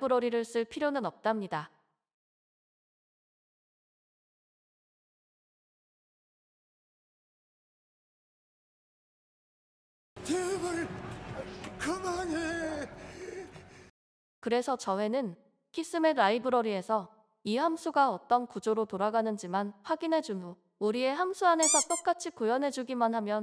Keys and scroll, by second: 20.2 BackSpace, 22.3 BackSpace.